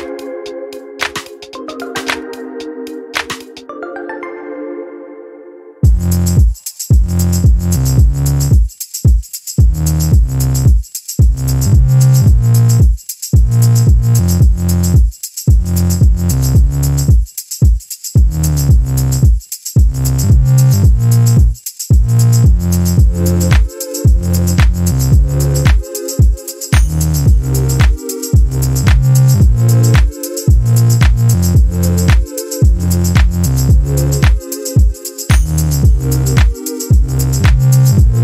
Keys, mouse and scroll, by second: 1.3 ctrl+scroll up 2, 1.8 ctrl+click, 2.4 ctrl+click, 3.8 click, 4.2 click, 7.6-12.0 ctrl+drag, 12.7 click, 14.4 ctrl+d, 15.4 click, 17.2 ctrl+click, 18.6-19.8 ctrl+drag, 20.1-21.4 drag, 22.6 click, 24.0 ctrl+shift+click, 25.7-28.5 ctrl+shift+drag, 29.6 click, 31.0 shift+click, 32.5 ctrl+g, 33.2 ctrl+click, 34.8 click, 36.0 ctrl+y, 36.8 ctrl+click.